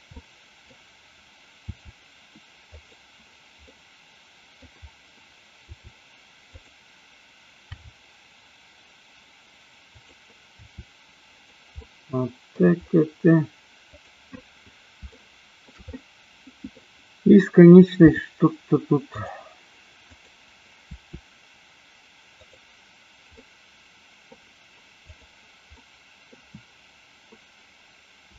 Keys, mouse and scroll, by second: 0.2 middle click, 1.7 r, 2.8 drag, 3.7 middle click, 5.7 r, 7.7 g, 9.9 click, 10.7 r, 11.3 click, 11.8-12.7 middle drag, 15.2-15.7 shift+middle drag, 15.8-16.7 middle drag, 18.0 r, 19.0 click, 20.0 click, 22.4 click, 23.3-24.3 middle drag, 25.7 middle click, 28.2 r.